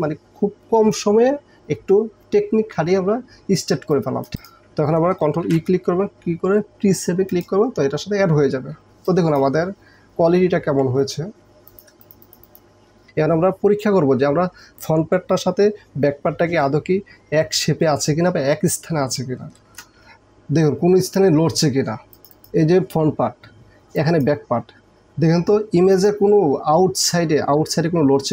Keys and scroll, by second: 3.8 space, 4.3 ctrl+e, 5.5 ctrl+e, 9.0 space, 19.8 ctrl+KP_0.